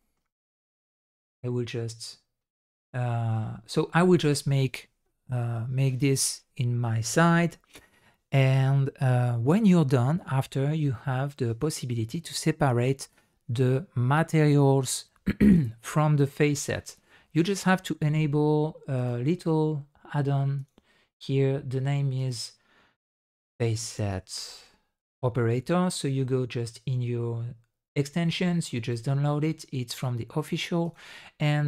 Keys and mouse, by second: 0.0 middle click, 0.1 click, 0.5 shift+click, 2.7-3.3 middle drag, 19.0-21.1 drag.